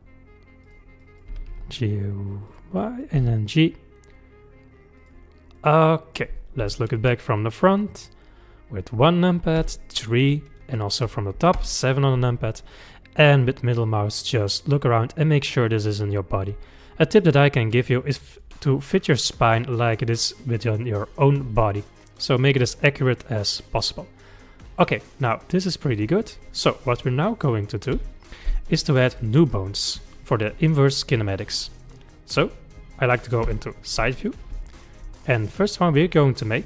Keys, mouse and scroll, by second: 1.0 click, 1.3 g, 2.8 click, 3.2 g, 5.6-6.7 middle drag, 6.7 KP_1, 9.6 KP_3, 11.6 KP_7, 13.0-16.1 middle drag, 19.1 click, 19.5 click, 20.0 click, 20.6 click, 21.6-24.7 middle drag, 28.0 KP_1, 31.8-33.5 middle drag, 33.5 KP_3, 34.6 shift+middle click, 35.2-36.5 scroll up 2.